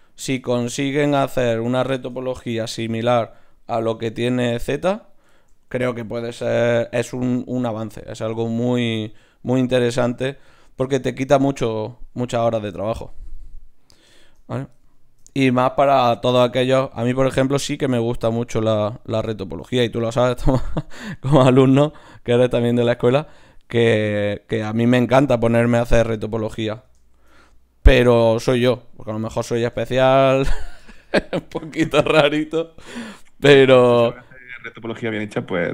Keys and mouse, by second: 2.5 g, 4.1 ctrl+r, 4.9-6.5 drag, 6.5 g, 7.3 click, 7.6 g, 9.1 g, 10.0 g, 10.8 g, 16.8 d, 16.9-19.0 drag, 27.1 shift+q, 28.7 middle click, 29.5 click, 30.1-32.0 right drag, 32.9 g, 34.1 g, 35.0 g.